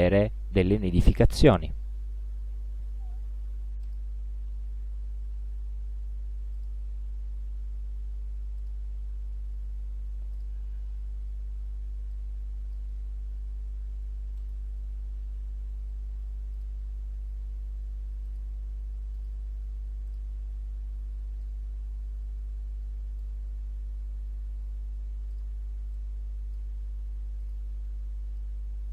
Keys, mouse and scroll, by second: 3.9 click, 6.6 click, 8.7 click, 10.4 click, 12.2-13.0 drag, 14.4 right click, 16.6 click, 18.3 click, 19.2 click, 20.1 click, 21.5-23.5 drag, 25.4 click, 26.0-26.8 drag, 27.5 click, 28.4 click.